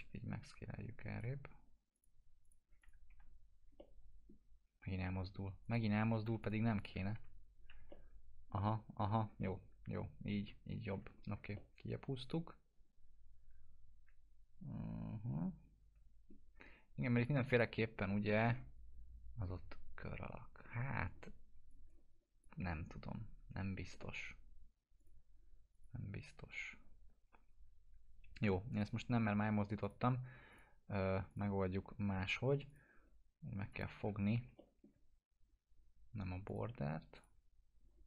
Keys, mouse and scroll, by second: 3.1 F4, 3.7-4.4 alt+middle drag, 5.6 click, 6.2 p, 6.4 click, 7.1 F4, 7.9-9.1 alt+middle click, 9.1 scroll down 1, 9.4-11.0 alt+middle drag, 11.1 scroll up 1, 11.5-16.5 alt+middle drag, 17.2-17.8 click, 17.9 scroll up 1, 21.6-22.6 drag, 24.1 right click, 24.9 click, 28.4 Delete, 28.7 click, 32.2 F4, 32.6 click, 34.0 alt+q, 34.5 alt+middle click, 36.4 click, 37.3-37.7 scroll up 1.